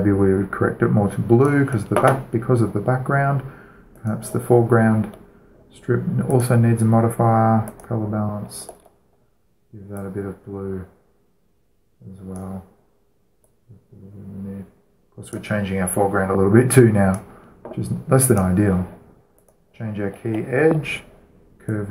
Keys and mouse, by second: 2.1-3.8 drag, 4.6-6.3 right drag, 6.3-7.0 middle drag, 7.0-10.1 drag, 10.6-12.4 drag, 13.0-15.8 drag, 16.0-18.9 drag, 18.9 middle click, 19.2-21.9 right drag.